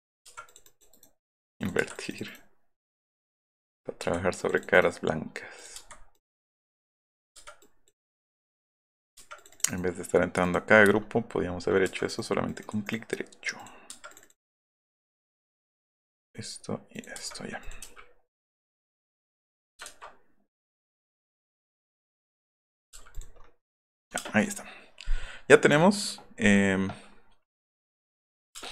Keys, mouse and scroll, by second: 0.0 click, 0.3 Escape, 0.4 click, 0.6 click, 1.6 click, 1.8 Escape, 1.9 click, 3.5 middle click, 3.8 middle click, 4.0 Escape, 4.4 click, 4.6 click, 4.7 right click, 5.5 click, 5.7 Escape, 6.1 click, 6.3 click, 6.4 right click, 7.1 click, 7.6 click, 7.9 click, 9.0 drag, 9.2 click, 9.7 right click, 10.4 click, 10.7-11.4 middle drag, 12.1 click, 12.5 click, 12.8 click, 15.1 click, 15.8 drag, 16.2 click, 17.0 middle click, 17.1 Escape, 17.2 middle click, 17.5 middle click, 17.6 middle click, 18.6 click, 19.2 click, 19.9 ctrl+z, 20.6 click, 22.4 click, 22.7 middle click, 22.9 b, 23.1 click, 23.8 click, 24.2 space, 24.4 right click, 27.7-28.1 scroll down 2, 28.2 middle click, 28.5 space, 28.6 scroll down 2.